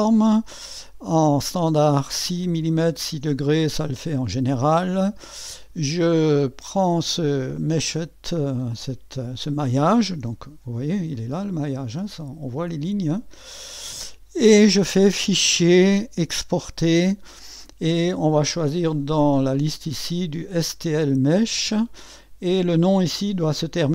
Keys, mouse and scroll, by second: 3.7 click, 4.1 click, 4.7-6.2 middle drag, 7.5-10.3 drag, 10.3 2, 11.1-12.9 drag, 15.1 click, 16.6 click, 21.0 click.